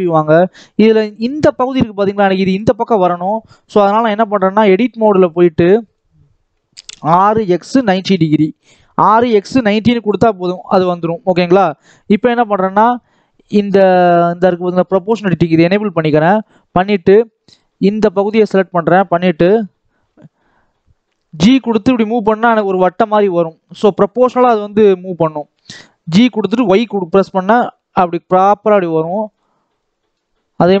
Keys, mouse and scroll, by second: 0.1 scroll down 2, 0.3-3.6 middle drag, 3.6 KP_7, 4.2 scroll down 2, 4.4 middle click, 5.1-6.8 drag, 6.8 r, 9.1-10.5 middle drag, 10.5 scroll up 1, 10.7 middle click, 11.6 KP_7, 12.5 shift+middle click, 13.2 click, 14.8 click, 16.2 click, 17.0 middle click, 17.6-18.3 scroll up 1, 18.3 click, 19.4 KP_7, 19.8-20.4 scroll down 2, 21.2 g, 29.6 middle click, 30.4 click.